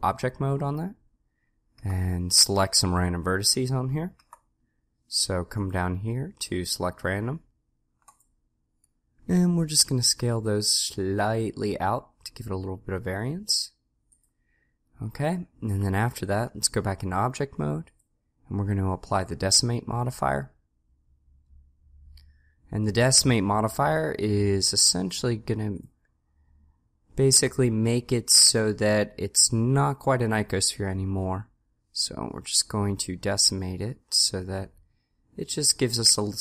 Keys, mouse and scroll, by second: 2.0 a, 4.2 a, 10.2 s, 16.4 Tab, 32.6-34.4 drag.